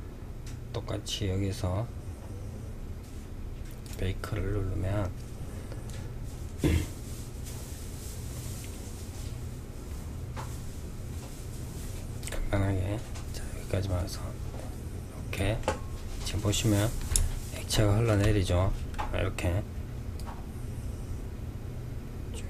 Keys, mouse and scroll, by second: 3.0 click, 11.5 click, 12.5-14.9 drag, 14.9-15.9 middle drag, 15.9-16.3 scroll up 1, 16.3-19.5 middle drag, 19.5-22.4 drag.